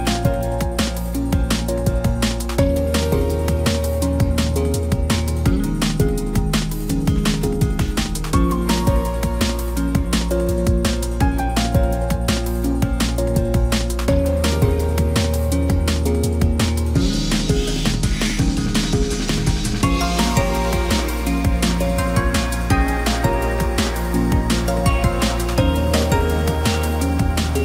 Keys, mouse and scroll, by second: 13.5 ctrl+d.